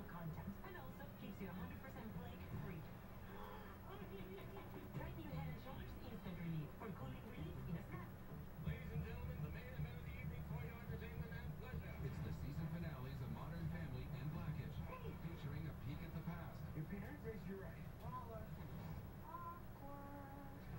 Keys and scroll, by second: 2.2 Delete.